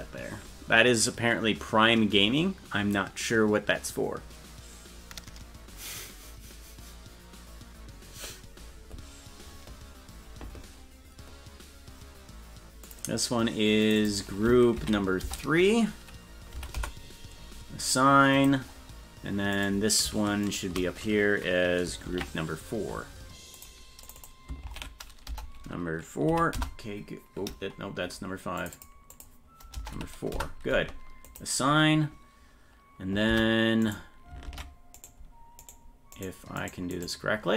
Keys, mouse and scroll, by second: 12.8 click, 13.8 click, 14.0-17.5 drag, 18.3 click, 19.5 right click, 20.4 shift+right click, 22.1 ctrl+l, 23.5 click, 24.0 click, 24.2-28.2 drag, 28.6 click, 28.7-30.8 drag, 31.2 click, 33.3 Tab, 33.8 right click, 34.4 ctrl+Tab, 34.9 right click, 36.1 right click, 36.9 right click.